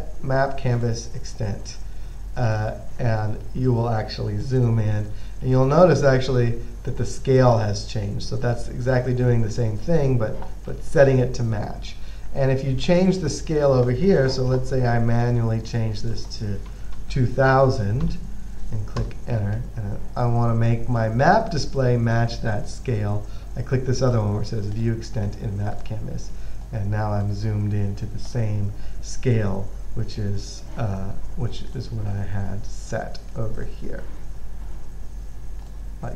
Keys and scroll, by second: 16.7-18.3 typing, 19.3 Return, 24.2 typing.